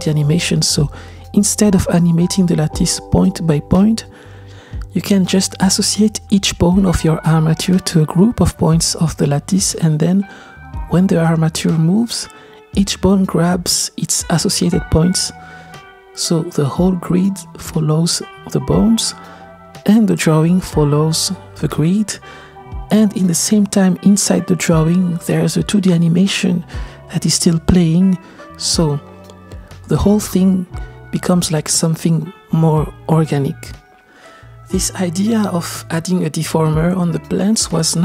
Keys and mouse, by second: 4.3-6.2 drag, 4.3-9.0 middle drag, 9.0 click, 9.3-10.6 right drag, 10.8 space, 11.8 click, 13.6 click, 14.5 click, 16.1-16.7 drag, 18.5 click, 19.5 middle click, 21.0 click, 23.9 click, 26.9-28.0 shift+middle drag, 37.6 click.